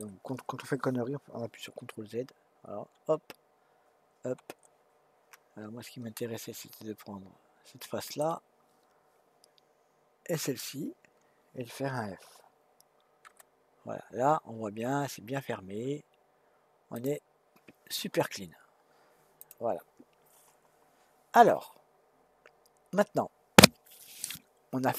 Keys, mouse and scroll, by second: 2.9 ctrl+z, 4.3 ctrl+z, 6.2-9.3 middle drag, 10.4 shift+click, 13.2 f, 16.9 click, 19.4 click.